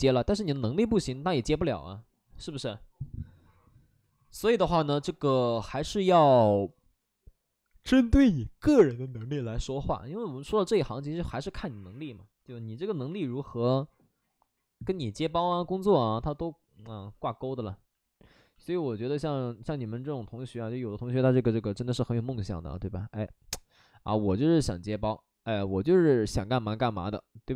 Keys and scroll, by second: 16.9 alt+s, 18.9 shift+f, 19.1 shift+f, 20.1 ctrl+d, 21.1 shift+f, 21.3 shift+f.